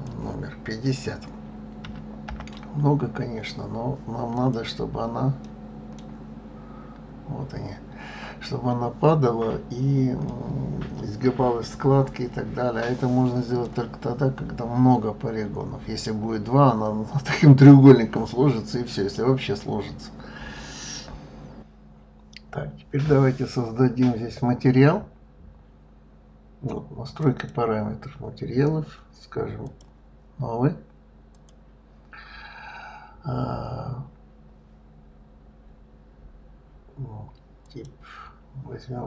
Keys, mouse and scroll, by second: 5.2 middle click, 6.1-7.0 scroll up 4, 7.6-10.0 scroll down 2, 10.0-13.0 middle drag, 27.2 click, 29.6 click, 31.3 click, 37.6 click.